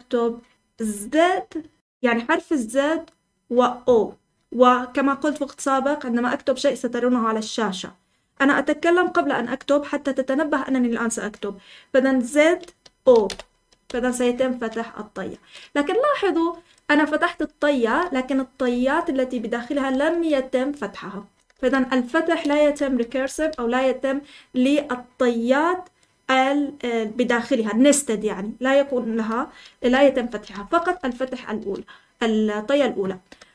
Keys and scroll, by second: 12.8-13.7 typing, 13.8 Escape, 17.1-23.2 typing, 29.7-31.5 typing, 33.4-33.5 typing.